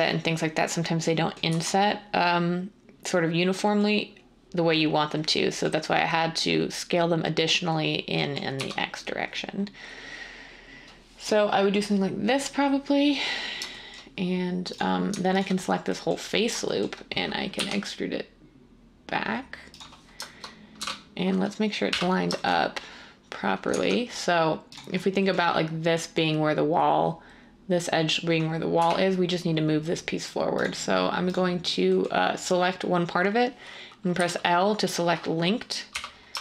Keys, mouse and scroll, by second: 1.5 z, 8.5 1, 17.5 e, 20.7 typing, 21.9 3, 28.7 3, 34.1 l, 35.9 3.